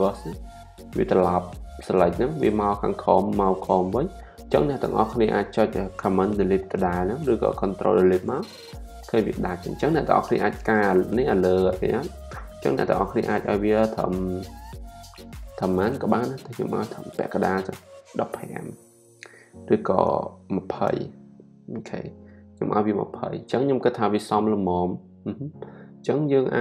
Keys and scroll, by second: 8.2 super+BackSpace, 17.3-18.2 typing, 20.3-21.3 typing, 24.6 super+d.